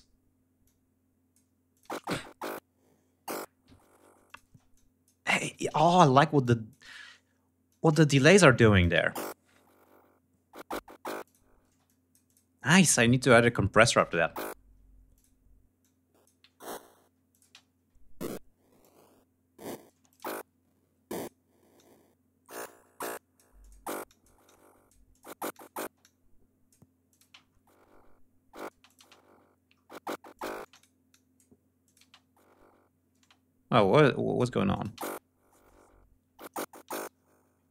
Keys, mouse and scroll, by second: 0.0 click, 1.1 click, 1.3 space, 3.7 click, 3.9 space, 4.1 click, 4.9 shift+right click, 5.2 shift+click, 5.8 click, 7.1 click, 8.1 click, 8.2 space, 8.5 ctrl+scroll down 1, 8.8 ctrl+scroll up 1, 10.6 click, 11.1 space, 11.3 click, 12.4 click, 13.3 click, 13.4 space, 13.7 ctrl+scroll down 1, 13.9 ctrl+scroll up 1, 14.5 ctrl+click, 15.2 click, 15.9 ctrl+scroll down 1, 16.4 ctrl+space, 16.7 ctrl+click, 18.2 click, 19.3 space, 19.5 click, 20.5 click, 21.2 click, 22.5 click, 23.0 click, 23.5 click, 24.5 click, 24.9 click, 25.3 space, 25.4 click, 26.5 click, 26.6 space, 26.8 ctrl+scroll up 2, 28.1 space, 29.2 ctrl+scroll down 2, 29.8 ctrl+click, 30.0 space, 30.1 click, 30.5 click, 31.3 click, 31.4 space, 32.6 space, 33.4 click, 34.1 click, 34.3 space, 37.1 ctrl+scroll down 2.